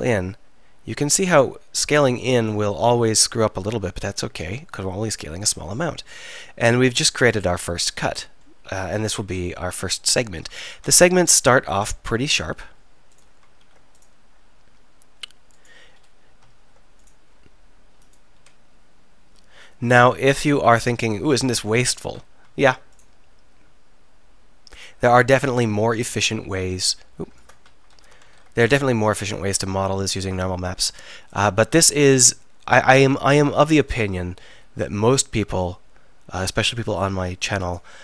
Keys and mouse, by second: 9.4 KP_1, 9.8 KP_3, 10.7 ctrl+r, 13.6 ctrl+r, 16.0 click, 16.6 ctrl+r, 17.4 click, 18.4 s, 20.8-21.8 drag, 22.6 ctrl+r, 24.9 click, 26.2 ctrl+r, 28.0 ctrl+z, 28.4 ctrl+r, 32.0 ctrl+r, 33.9 click, 34.5 s.